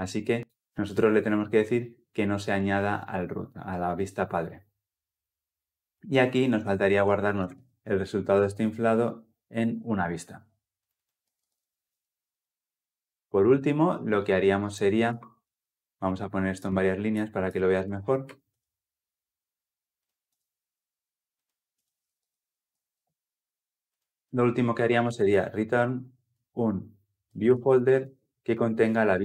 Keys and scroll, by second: 8.3 Return, 11.6 Return, 11.7 Escape, 22.0 ctrl+alt+l, 22.4 ctrl+alt+o, 25.6 Return.